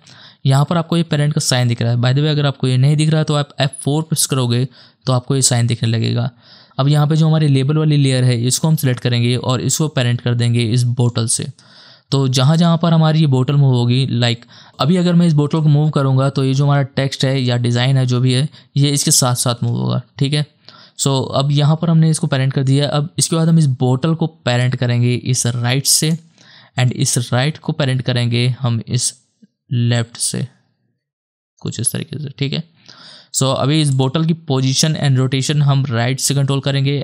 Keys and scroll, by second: 3.6 F4, 4.2 F4, 19.7 ctrl+z.